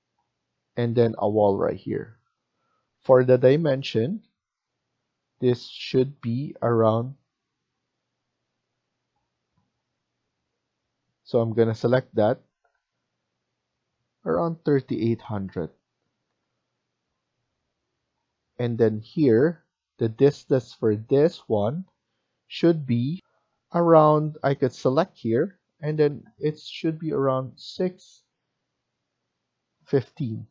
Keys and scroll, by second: 2.6 Escape, 3.0 Escape, 3.2 Escape, 14.2-15.1 typing, 16.2 Return, 18.9 Escape, 23.1 F1, 27.6 6, 29.5-30.3 typing.